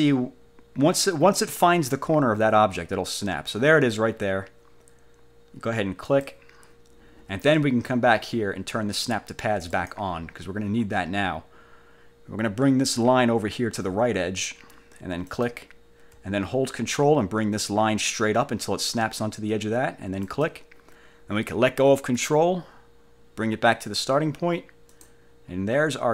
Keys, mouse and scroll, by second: 6.1 click, 9.8 click, 15.5 click, 20.4 ctrl+click, 25.1 click.